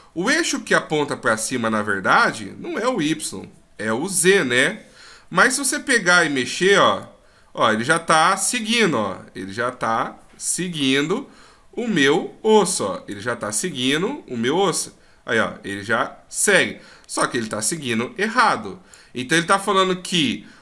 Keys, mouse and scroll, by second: 1.3 middle click, 5.4 right click, 7.0 click, 14.7 click, 20.1 right click.